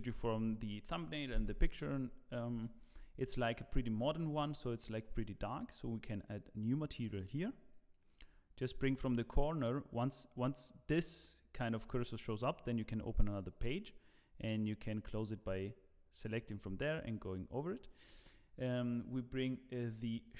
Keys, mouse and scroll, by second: 1.6-2.3 scroll up 1, 2.6 shift+middle click, 3.5 click, 6.6 click, 9.0 click, 11.9 click, 14.5 click, 18.7 click.